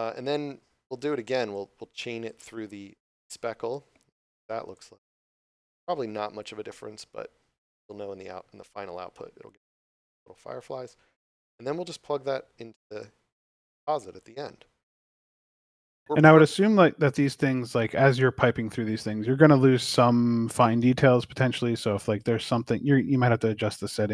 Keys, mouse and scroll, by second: 1.5 click, 12.0 click, 16.5 scroll down 1.